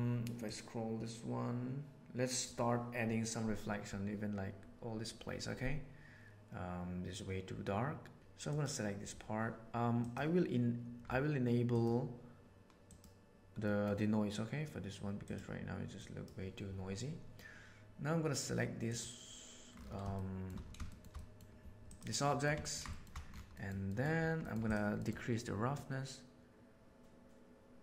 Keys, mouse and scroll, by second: 0.4-2.4 drag, 9.9 click, 12.8 click, 13.6 middle click, 15.2 click, 15.9 drag, 18.8 click, 19.6 middle click, 20.1 shift+middle drag, 20.8 shift+middle click, 21.1 middle drag, 21.8 click, 22.2 middle click, 22.5 ctrl+middle click, 22.8 shift+middle click, 23.4 middle click, 23.9 middle click, 24.4 middle drag, 25.7 click.